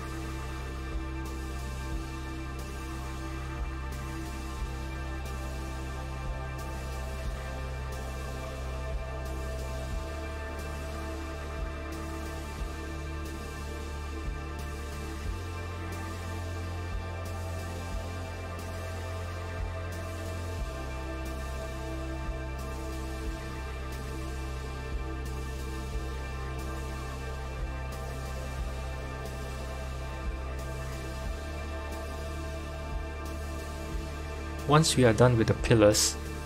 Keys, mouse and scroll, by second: 1.7 g, 7.2 Tab, 9.0 click, 9.6 g, 12.7 KP_1, 13.9 click, 15.2 s, 18.1 Tab, 18.7 KP_7, 19.3-19.9 scroll down 3, 19.8-21.3 shift+middle drag, 21.3 shift+d, 22.9-24.7 drag, 24.7 r, 28.8 click, 30.7 click, 33.0 click, 35.0 Tab, 36.1 middle click.